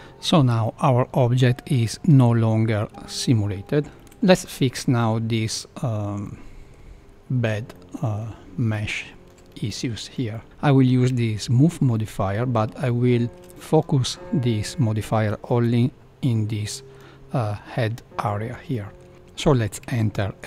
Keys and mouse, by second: 0.7-1.5 middle drag, 2.0 space, 2.9 space, 3.9 shift+Left, 4.3 shift+middle click, 4.9 middle click, 6.2-6.7 middle drag, 7.7-8.1 middle drag, 8.7 middle click, 9.6 shift+middle click, 10.3 middle click, 10.4 Tab, 10.4 a, 11.1 Tab, 11.9 middle click, 12.8 shift+middle click, 13.5 middle click, 16.7 middle click, 18.7 middle click, 19.8 Tab.